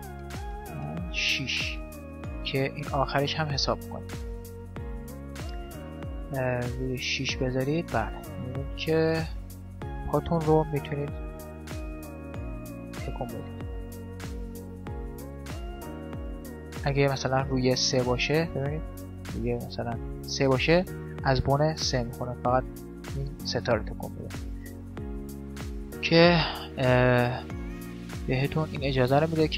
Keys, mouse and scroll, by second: 2.3-4.3 middle drag, 4.1 z, 6.6-7.9 middle drag, 6.6 right click, 8.4 right click, 8.6-10.0 middle drag, 10.2 middle click, 10.8 z, 12.0 KP_5, 12.4-14.1 middle drag, 14.1 click, 14.9 right click, 15.3 middle click, 16.0-17.0 drag, 17.0 middle click, 18.0-21.6 drag, 22.1-23.5 middle drag, 22.6-24.3 right drag, 27.8-29.5 right drag.